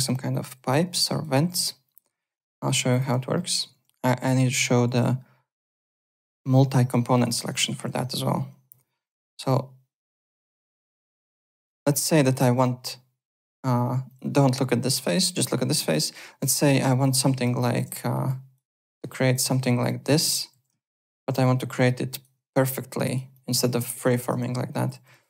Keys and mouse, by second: 0.3 alt+click, 1.0 alt+click, 1.5 w, 1.8 click, 2.1 3, 2.4 alt+middle click, 2.9 click, 3.3 alt+middle click, 3.6 alt+Tab, 4.8 alt+Tab, 7.2 alt+middle click, 7.4 alt+right click, 8.6 Delete, 9.0 click, 10.3 alt+middle click, 10.6 alt+click, 10.9 alt+middle click, 11.6 click, 14.0 click, 15.2 click, 15.7 alt+click, 16.0 alt+middle click, 16.6 shift+click, 17.6 shift+click, 17.9-22.3 typing, 18.2 click, 19.1 shift+click, 19.8 click, 20.9 shift+click, 21.8 click, 22.7 click, 23.3 alt+click, 23.9 alt+click, 24.4 ctrl+z.